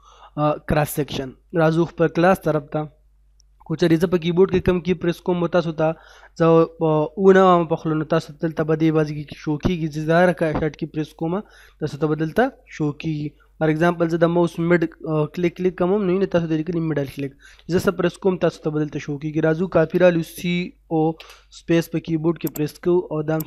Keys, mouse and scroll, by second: 0.0 middle click, 0.8-1.5 scroll up 1, 1.5 middle click, 2.1 scroll up 1, 2.5-7.6 middle drag, 11.0 middle click, 14.0 middle click, 20.5-21.2 typing, 22.5 click.